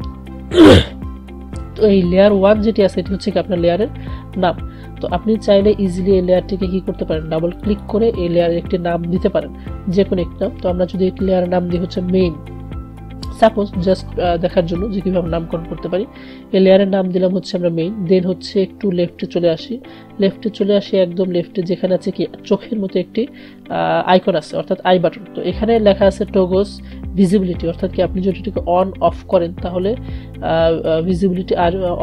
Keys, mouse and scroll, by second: 7.6 click, 10.7-12.7 typing, 13.4 click.